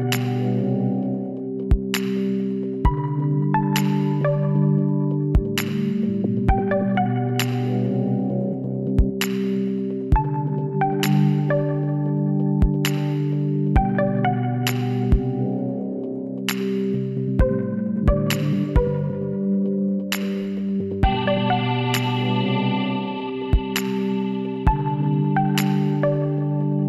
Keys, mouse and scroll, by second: 3.2 s, 7.9-11.5 middle drag, 11.1 s, 16.0 middle click, 16.6 Tab, 17.8 z, 18.7 middle click, 20.5-22.2 drag, 22.2 middle click, 22.4 Tab, 23.0-24.1 middle drag, 23.2 Tab, 23.5 a, 25.8 Tab, 26.2 KP_1.